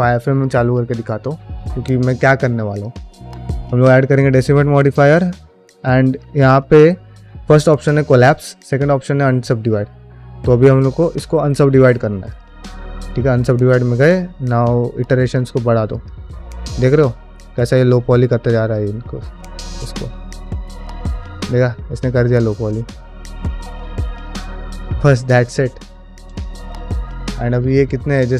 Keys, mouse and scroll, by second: 0.3 click, 2.6-4.3 drag, 12.1 click, 15.1 click, 15.8 click, 16.7 click, 17.3 click, 17.9 click, 18.6 click, 25.5 middle click, 26.8-27.7 middle drag.